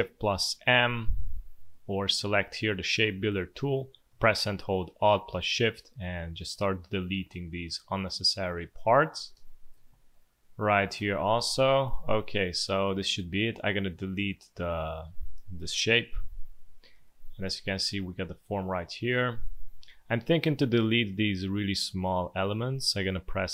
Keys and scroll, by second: 0.0 shift+m, 9.3 space, 11.4 space, 12.4 v, 16.3 Delete, 16.9 space, 20.4 a.